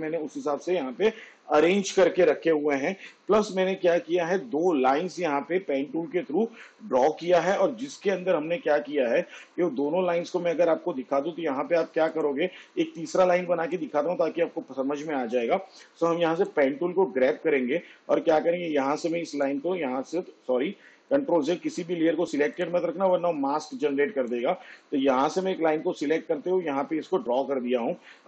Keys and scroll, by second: 21.4 ctrl+z.